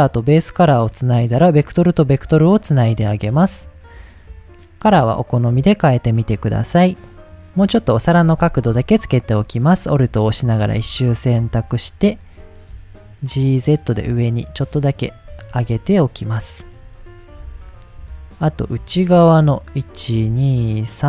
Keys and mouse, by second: 0.6-1.7 drag, 2.4 click, 3.2 click, 5.0 click, 5.4 click, 8.2 Tab, 9.6 alt+click, 10.6 g, 10.8 z, 15.3 click, 15.5 Tab, 16.3 middle click, 17.4 Tab, 19.7 alt+click, 20.4-21.0 alt+shift+drag.